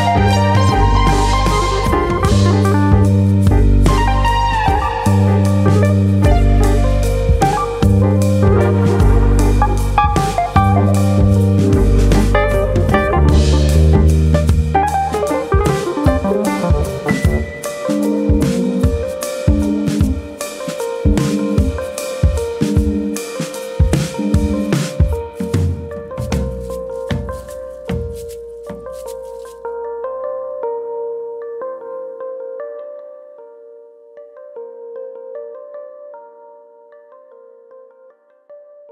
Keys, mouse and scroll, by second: 0.6 click, 1.9 click, 4.5 click, 6.1 ctrl+KP_Subtract, 7.3 click, 8.5 click, 11.8 click, 13.7 click, 20.1 click, 21.0 alt+click, 21.8 click, 23.3 s, 24.3 click, 29.6 alt+click, 30.5 g, 31.5 click, 32.1 alt+click, 32.8 g, 34.4 click, 35.6 click, 35.7 l, 36.9 shift+d.